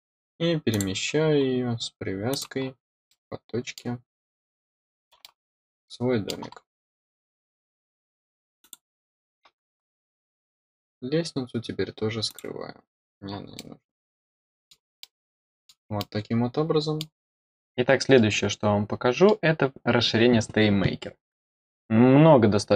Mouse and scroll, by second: 0.6 click, 1.0-1.4 scroll up 4, 2.2 click, 2.5 scroll down 2, 3.0 middle click, 5.1-6.2 middle drag, 6.7-7.0 scroll up 4, 8.5 click, 10.4 scroll down 2, 12.2 click, 12.9 middle click, 13.5-14.6 middle drag, 14.9 middle click, 15.9-16.9 middle drag, 18.1-19.2 middle drag.